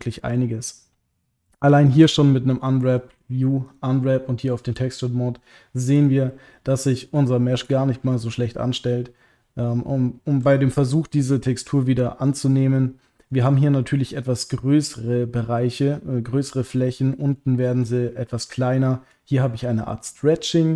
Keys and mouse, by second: 0.2 middle click, 0.6 click, 1.7 a, 3.1 u, 6.3 middle click, 7.3 shift+middle click, 7.9 ctrl+click, 8.5-13.3 middle drag, 16.6 middle click, 17.3 middle click, 18.7 middle click, 19.9 middle click, 20.4 shift+middle click.